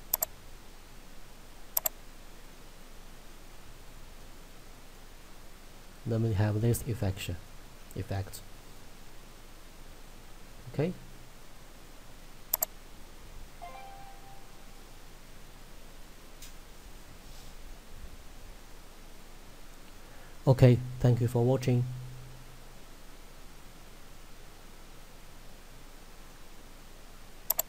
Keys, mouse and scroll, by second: 2.6 middle click, 3.7 scroll up 1, 4.2 middle click, 6.0-6.3 scroll up 1, 6.3 middle click, 7.8 scroll down 1, 8.3 middle click, 8.6 scroll down 1, 8.9 scroll up 1, 9.2 middle click, 11.7 scroll down 1, 12.6 click, 17.8 middle click, 27.6 click.